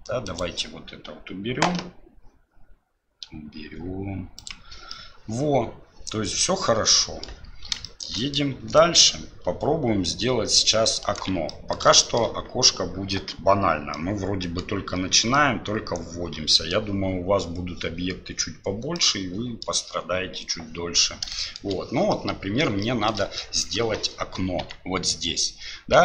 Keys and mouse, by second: 0.3-4.7 drag, 4.9-7.2 middle drag, 7.9 shift+middle click, 8.2 middle click, 8.8-11.2 drag, 11.2 d, 11.5 click, 11.5 d, 12.0 shift+click, 13.9 click, 15.3-16.7 drag, 18.9 click, 21.3 click, 21.3 middle click, 22.1 click, 22.1 middle click, 22.8 shift+click, 22.8 shift+middle click, 23.4 click, 23.4 middle click.